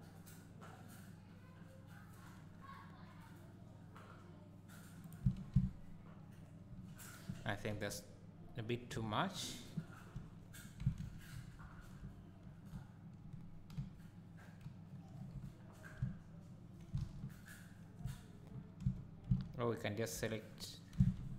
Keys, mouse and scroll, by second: 5.2 Tab, 7.7 KP_1, 9.0 KP_3, 10.1 Tab, 11.1 ctrl+z, 11.5 ctrl+z, 13.8 KP_1, 17.0 alt+a, 18.8 1, 20.5 scroll up 1, 21.0 x.